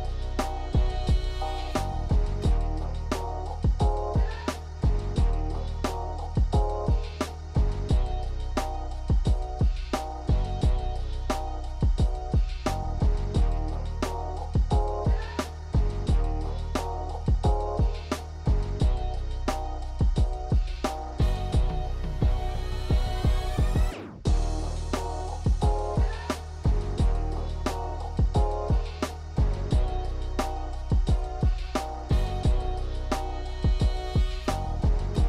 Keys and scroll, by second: 11.6 ctrl+z, 23.5 f, 29.2 l, 34.7 f.